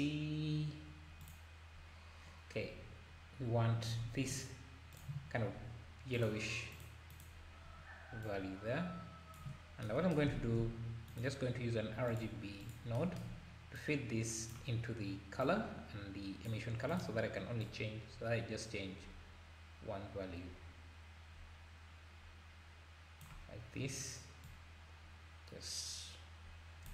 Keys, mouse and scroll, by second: 5.0 click, 6.1 click, 7.1 click, 10.4 shift+a, 13.8 click, 15.4 drag, 16.9 click, 24.4 click.